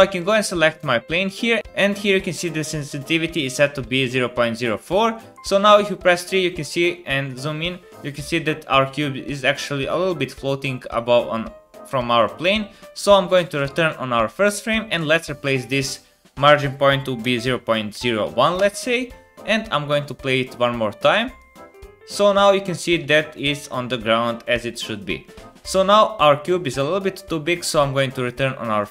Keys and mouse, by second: 0.2 middle click, 0.9 click, 1.1 click, 5.3 KP_3, 6.5 shift+middle click, 13.5-15.0 drag, 13.5-15.0 middle drag, 13.5-15.0 right drag, 15.3-20.5 drag, 15.3-20.5 middle drag, 15.3-20.5 right drag, 20.2 space, 23.0 space, 23.3 middle click, 24.2 middle click, 24.5 middle click, 25.7-28.1 drag.